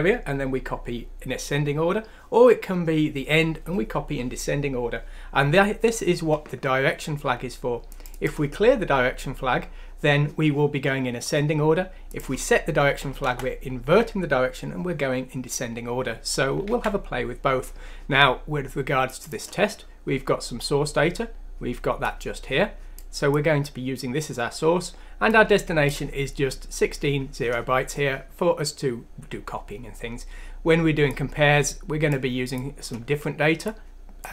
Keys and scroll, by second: 13.2 Delete, 16.7 ctrl+z.